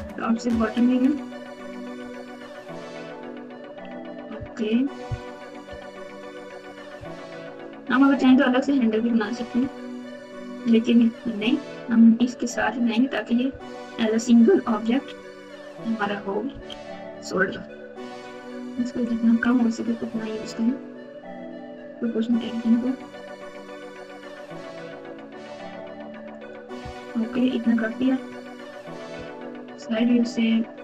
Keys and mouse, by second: 0.0 KP_9, 1.0 KP_Add, 1.4 KP_Add, 1.4 KP_Add, 2.3 s, 4.3 KP_1, 5.6 KP_Subtract, 6.6 KP_Subtract, 6.8 KP_Subtract, 6.9 KP_Subtract, 9.3 ctrl+z, 9.5 ctrl+z, 11.1 KP_2, 12.2 KP_7, 12.5 KP_9, 13.8 KP_Add, 13.9 KP_Add, 14.0 KP_Add, 14.0 KP_Add, 16.4 o, 17.4 s, 27.4 KP_1, 28.8 KP_6, 29.1 KP_6, 29.4 KP_3.